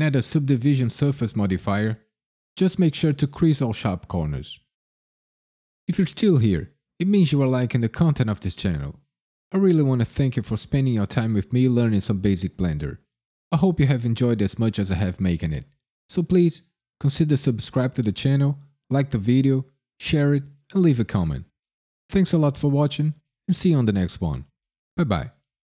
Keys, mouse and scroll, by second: 0.2 middle click.